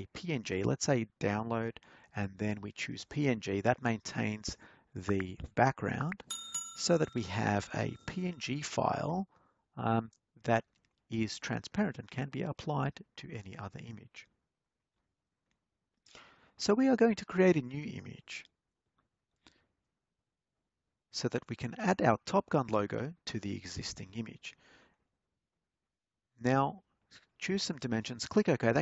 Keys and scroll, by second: 20.9-21.9 typing, 23.1-24.1 typing.